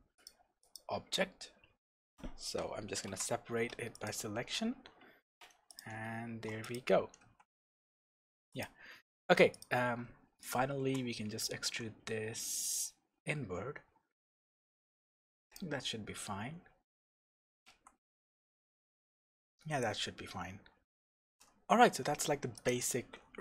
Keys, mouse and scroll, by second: 0.2 shift+click, 0.6 shift+click, 3.1 p, 4.7 Tab, 5.7 click, 6.6 click, 7.3 shift+z, 8.5 click, 8.9 Tab, 9.5 click, 10.4 shift+click, 11.6 e, 15.5 click, 16.1 scroll up 1, 16.3 Tab, 16.8-17.2 scroll down 1, 17.2-17.7 scroll up 1, 17.7 shift+z, 19.8-20.4 scroll down 2, 20.4-21.1 scroll down 1, 21.1 shift+z, 21.5-22.5 scroll down 2, 22.5 click.